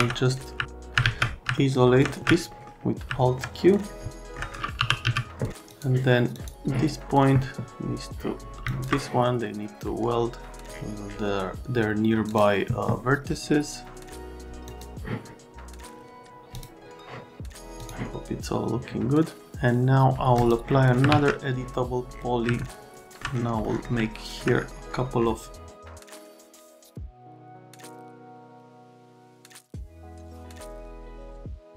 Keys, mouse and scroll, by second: 1.0 alt+w, 1.6 alt+middle click, 2.5 middle click, 3.1 alt+middle click, 3.6 middle click, 4.1 alt+middle click, 4.8 r, 5.1 z, 5.4 right click, 5.7 click, 6.3 click, 8.6 ctrl+click, 12.2 click, 14.7 click, 16.5 click, 17.8 click, 20.4 click, 21.1 alt+1, 22.6 alt+middle click, 23.6 middle click, 24.0 alt+middle click, 26.4 click, 26.9 click, 27.0 right click, 27.1 middle click, 27.4 click, 28.0 alt+1, 28.3 click, 28.5 right click, 28.6 alt+middle click, 29.5 click, 29.7 right click, 29.9 click, 30.6 alt+middle click, 31.0 alt+middle click.